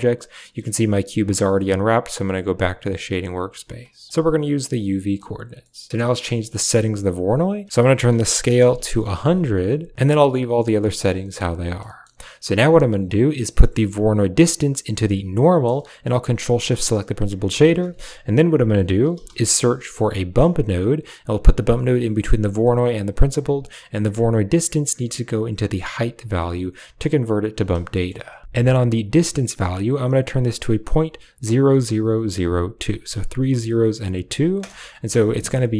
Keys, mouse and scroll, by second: 0.4 a, 3.9 click, 4.1-4.6 typing, 4.5 click, 4.5 click, 6.4 drag, 6.6 typing, 7.5 click, 8.3 0, 11.3 click, 11.6 middle click, 14.0-15.3 drag, 16.3 ctrl+shift+drag, 16.4-17.5 typing, 16.6 click, 22.4 typing, 22.9 drag, 24.6-25.8 drag, 26.2 click, 27.9 shift+click, 28.4 click.